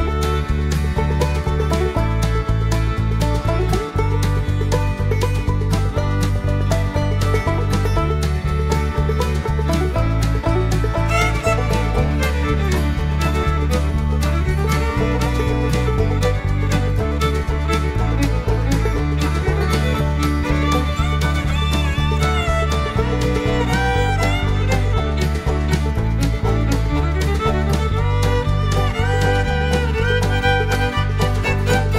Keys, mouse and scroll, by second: 0.7 click, 2.2 click, 3.2-3.5 scroll down 1, 3.8 scroll up 2, 4.5 0, 6.0 click, 6.6 click, 7.2 0, 8.1-8.4 scroll up 2, 9.4 click, 9.9 space, 12.5-12.8 scroll up 2, 14.2-14.7 scroll down 1, 14.7-15.8 middle drag, 16.6 click, 17.0 space, 18.8 click, 19.2 space, 20.1 click, 20.4 space, 21.7 click, 22.0 space, 23.3 click, 23.9 space, 24.6 middle click, 26.5 click, 28.2 2, 30.0 click, 31.0-31.5 scroll down 1.